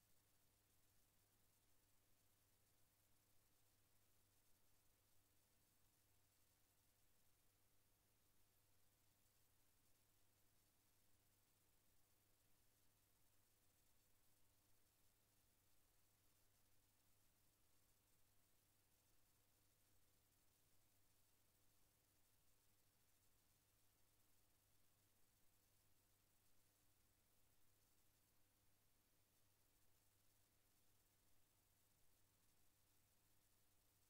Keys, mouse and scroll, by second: 1.9-3.7 drag, 4.8-6.0 drag, 7.2 click, 10.5 click, 14.5 KP_Enter, 17.1 click, 18.8 KP_Enter, 23.7 click, 25.9 KP_Enter, 28.3 click, 31.2 KP_Enter.